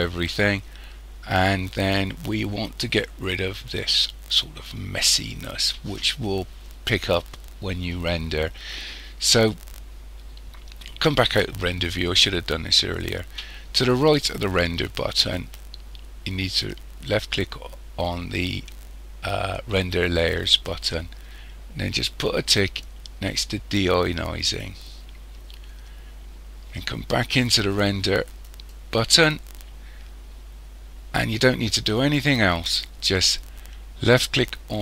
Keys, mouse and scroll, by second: 20.1 click, 24.5 click, 28.4 click.